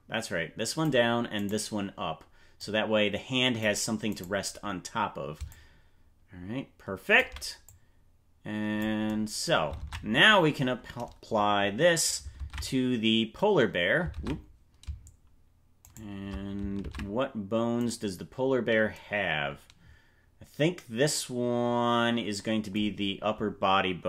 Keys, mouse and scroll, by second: 1.5 right click, 2.5-3.6 drag, 4.3 right click, 5.4-7.2 shift+drag, 7.6-8.8 drag, 9.9 ctrl+Tab, 10.5-10.9 scroll down 5, 12.3 ctrl+Tab, 14.2 ctrl+Tab, 16.0 shift+right click, 16.9 ctrl+Tab, 17.9 right click.